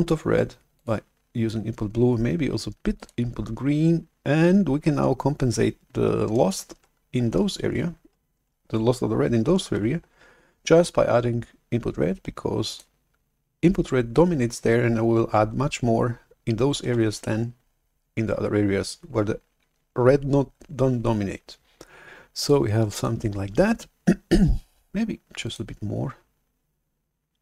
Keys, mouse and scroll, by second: 0.7-3.7 drag, 9.6 shift+super+F11, 12.8 click, 16.9 shift+super+F11, 22.3 click, 25.4 click, 27.3 click.